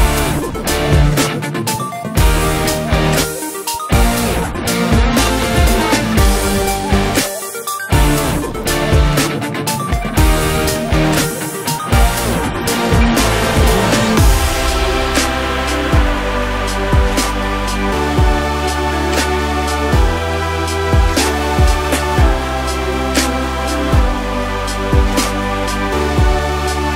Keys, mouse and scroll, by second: 3.8-5.5 scroll up 2, 5.8 click, 7.1 scroll down 1, 7.3-8.4 middle drag, 7.7 scroll down 1, 7.8 ctrl+s, 7.9-8.4 scroll up 1, 8.4 click, 9.4 click, 9.7-11.0 drag, 10.3 t, 12.7 shift+middle click, 13.1 scroll down 2, 13.4 click, 13.8 click, 14.0 Tab, 14.4 click, 14.6 shift+click, 14.8 shift+click, 15.1 shift+click, 15.7-17.0 scroll down 1, 17.0 click, 17.4-18.9 drag, 18.2 l, 19.4 click, 20.7 Tab, 20.9 click, 21.5 click, 21.7-23.6 drag, 22.2 o, 24.9 click, 25.5-26.7 middle drag, 26.7 click.